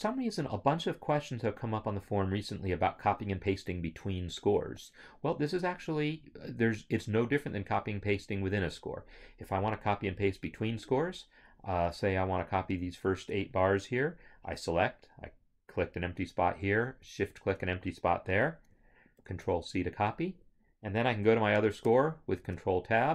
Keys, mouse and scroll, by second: 7.3 click, 12.9 shift+click, 15.2 shift+click, 17.1 shift+click, 20.2 ctrl+c, 21.8 ctrl+c, 21.9 ctrl+Tab.